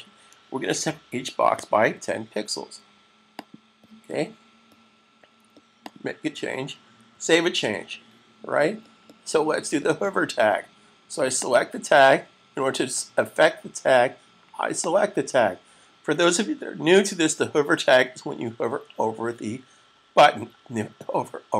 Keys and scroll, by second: 1.3-1.8 typing, 7.1 super+s.